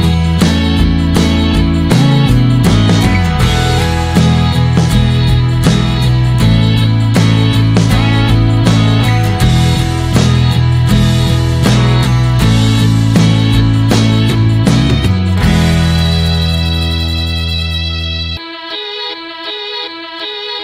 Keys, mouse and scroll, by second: 0.1 middle click, 0.8 scroll down 3, 1.0 middle click, 1.3-1.8 scroll up 2, 1.8 click, 2.8 shift+middle click, 2.9 shift+scroll up 1, 3.2-4.3 drag, 4.3-5.0 scroll up 3, 4.5 shift+middle click, 5.1 click, 6.3 click, 7.7 r, 8.8-10.7 drag, 12.8 click, 13.2-14.1 scroll up 1, 14.1-16.1 middle drag, 16.1 click, 16.3-16.7 scroll down 1, 16.7-19.0 drag, 19.1 click.